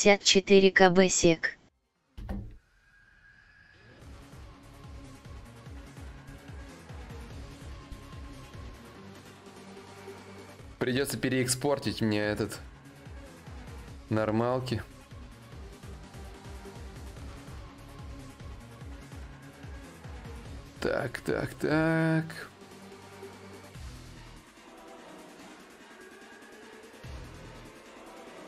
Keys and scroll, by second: 3.3 d, 3.7 d, 5.3 d.